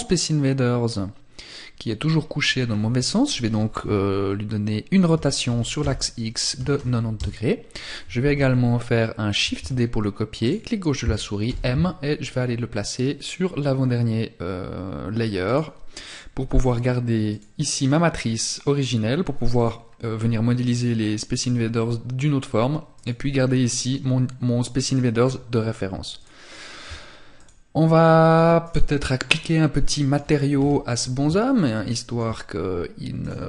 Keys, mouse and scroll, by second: 0.0 middle click, 9.6 click, 10.6 m, 14.6 click, 22.1 click, 24.0 click, 25.4 shift+click, 26.6 click, 27.8 right click, 28.4-29.0 scroll up 4, 29.0 middle click, 29.4-29.8 scroll up 1, 29.8 KP_1, 30.7 shift+middle click, 32.4 click.